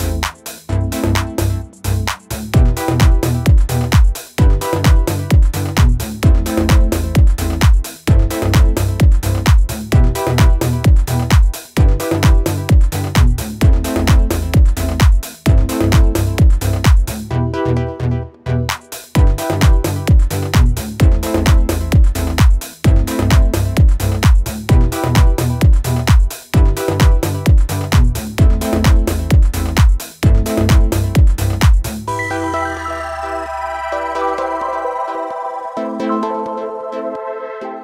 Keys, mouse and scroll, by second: 1.0 v, 1.7-2.6 drag, 3.4 right click, 3.4 right click, 4.2 click, 13.6 click, 19.3 click, 19.4-29.6 typing.